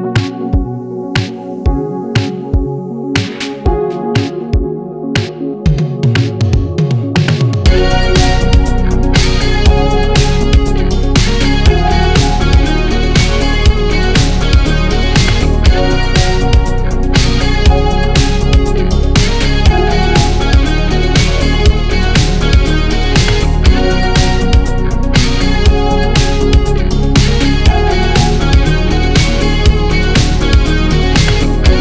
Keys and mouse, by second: 0.3 s, 6.2 shift+middle click, 6.7-8.0 middle drag, 8.3 Tab, 8.6-9.1 middle drag, 9.7 middle drag, 10.6 drag, 10.6 middle drag, 10.6 right drag, 12.4 ctrl+a, 13.0-13.4 drag, 14.1 ctrl+a, 15.0 drag, 15.0 middle drag, 15.0 right drag, 17.1 click, 19.7 shift+middle click, 20.7-21.6 middle drag, 25.7-27.2 shift+middle drag, 27.6-28.2 middle drag, 28.4-29.4 shift+middle drag, 30.0 click, 31.5 ctrl+j.